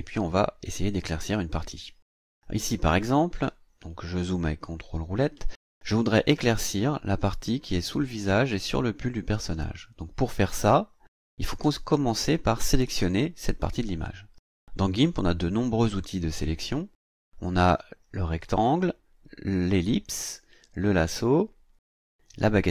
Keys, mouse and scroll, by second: 2.5 click, 4.7-5.0 ctrl+scroll up 2.